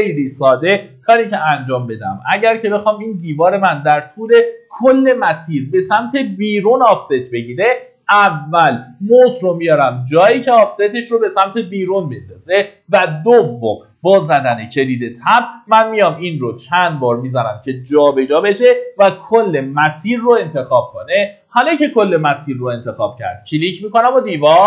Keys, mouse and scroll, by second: 0.6 1, 1.7 middle click, 1.8-2.2 scroll down 1, 14.2 Tab, 15.3 Tab, 22.5 click.